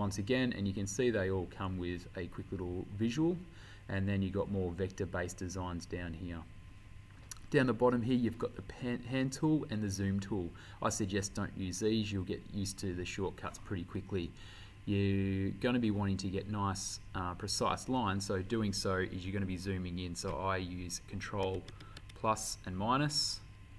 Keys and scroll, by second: 21.5 ctrl+=.